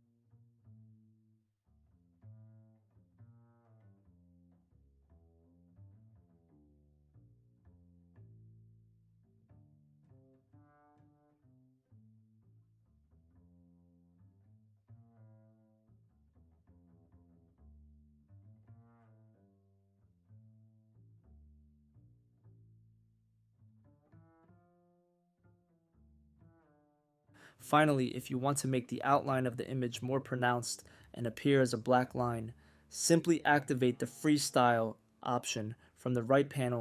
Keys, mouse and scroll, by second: 0.0-1.1 drag, 1.2-1.7 drag, 2.4 click, 2.4-12.8 drag, 14.1-21.8 drag, 22.3 click, 23.0 click, 23.6-28.5 drag, 28.8 click, 30.1-31.1 drag, 35.9-36.8 drag.